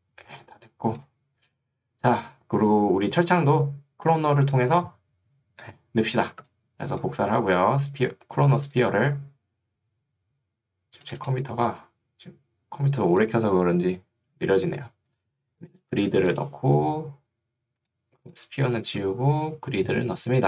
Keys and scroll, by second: 15.2-16.5 typing.